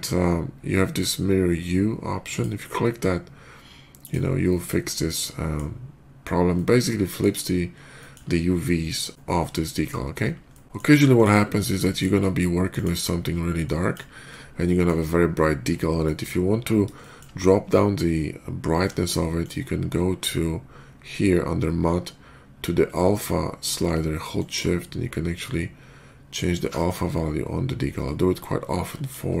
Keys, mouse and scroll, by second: 2.1 click, 3.9 click, 4.3-5.4 middle drag, 6.4-7.0 middle drag, 7.8 shift+middle click, 8.1 shift+middle click, 8.4-9.7 shift+middle drag, 10.3-10.6 scroll down 1, 11.0 shift+click, 11.3 scroll down 1, 11.6 shift+middle click, 12.6 shift+click, 13.5 click, 14.5 middle drag, 15.9 shift+middle drag, 16.8 shift+middle click, 18.2 scroll down 1, 18.8 scroll down 1, 19.2 shift+click, 19.7 middle click, 20.0 middle click, 24.2-28.9 shift+drag.